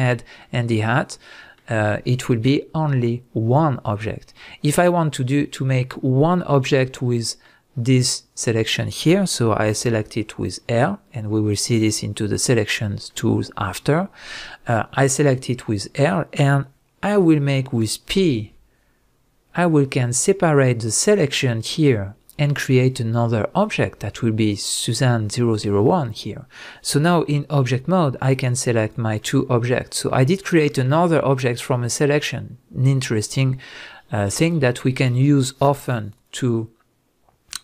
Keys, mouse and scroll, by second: 3.3-11.7 middle drag, 4.7 Tab, 9.6 l, 11.7 click, 13.1-28.3 middle drag, 27.6 Tab, 28.3 click, 28.8 click, 29.2-37.6 middle drag.